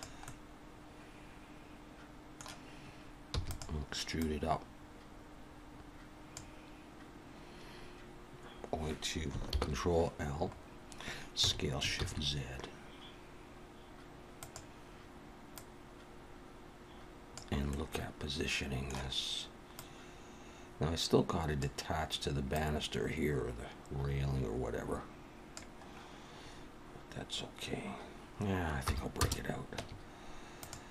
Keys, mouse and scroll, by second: 0.2 middle click, 3.7 e, 4.2 click, 9.5 ctrl+l, 10.5 scroll up 2, 11.4 s, 15.5 click, 17.7 middle click, 19.8 click, 22.6 click, 28.9 p, 29.8 Tab, 30.5 click.